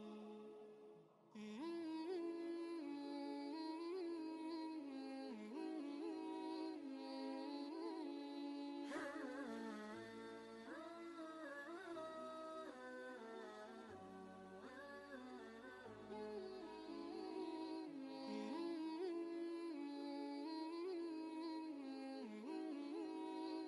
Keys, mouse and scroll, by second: 0.2 Tab, 1.7 alt+click, 2.6 ctrl+space, 2.7 ctrl+click, 3.1 space, 5.2 click, 5.6 space, 6.0 ctrl+click, 6.4 ctrl+space, 7.0 space, 9.0 click, 10.1 typing, 10.1 ctrl+space, 10.3 ctrl+click, 10.7 ctrl+space, 11.9-13.7 drag, 12.1 typing, 13.7 ctrl+space, 14.2 space, 14.4 click, 15.3 ctrl+space, 15.4 ctrl+click, 15.8 ctrl+space, 16.3 ctrl+space, 17.4-23.6 drag.